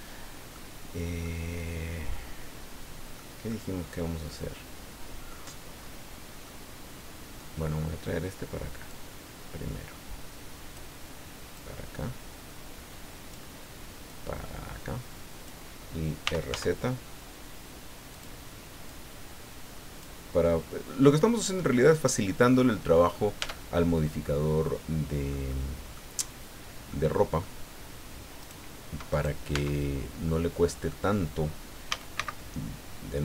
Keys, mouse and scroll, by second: 0.9 scroll down 1, 1.2-3.3 drag, 3.5-5.5 middle drag, 5.8 scroll up 2, 6.1-6.4 scroll down 2, 6.4-7.5 middle drag, 8.9-10.9 drag, 11.5-13.5 drag, 14.0-15.6 drag, 16.2 r, 16.5 z, 18.1 click, 18.8-20.2 drag, 21.3 click, 22.3 click, 23.4 Tab, 24.3-25.5 drag, 26.2 scroll up 1, 26.5 scroll down 1, 26.9 click, 28.4 right click, 29.1 right click, 29.5 Tab, 30.3 click, 31.9 a, 32.1 c.